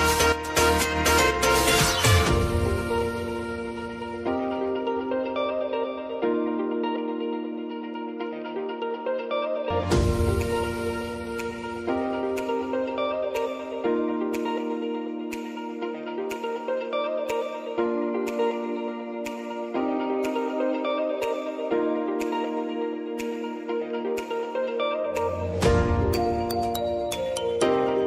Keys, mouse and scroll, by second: 2.8 space, 4.2 click, 4.8 u, 8.3-13.0 drag, 16.5 u, 17.7-19.7 drag, 19.7 space, 20.9 click, 22.2 space, 25.5 space, 25.8 click, 26.2 u, 26.8 click.